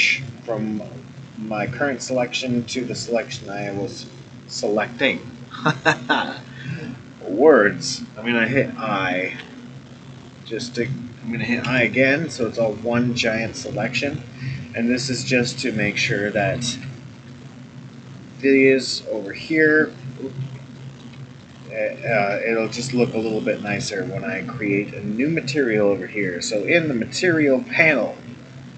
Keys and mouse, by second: 9.4 i, 15.5-16.5 middle drag, 17.3 shift+click, 20.4 ctrl+z, 20.8 middle click, 21.4 shift+click, 22.6-23.7 middle drag, 26.5 click.